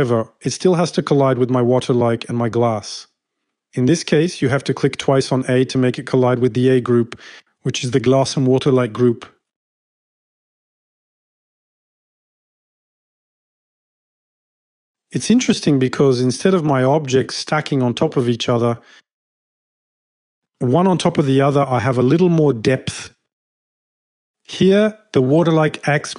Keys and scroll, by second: 18.0-18.7 typing.